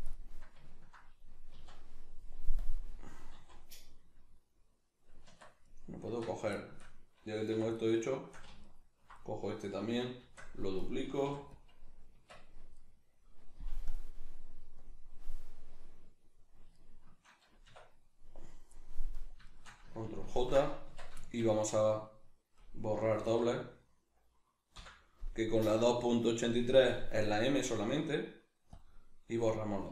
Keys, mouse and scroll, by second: 0.7-2.6 ctrl+middle drag, 1.5 z, 2.6 click, 3.3 z, 4.4-5.7 middle drag, 5.3 Tab, 5.7 right click, 6.1 Tab, 6.6-7.7 shift+middle drag, 7.6 3, 7.7 right click, 8.7 alt+right click, 9.2-10.5 middle drag, 10.5 shift+d, 10.9 right click, 11.3 p, 12.2 Tab, 12.7 right click, 13.9-16.7 drag, 16.7 shift+right click, 17.6 \, 18.7-19.1 middle drag, 19.1 right drag, 19.4 shift+right click, 20.3 ctrl+j, 20.8 Tab, 21.2-22.6 shift+middle drag, 22.6 right click, 22.9 l, 29.5 middle click.